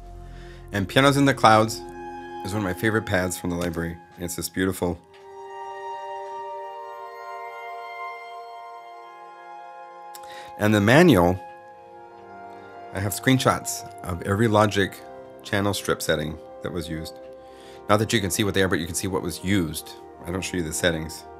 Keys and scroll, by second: 3.4 0.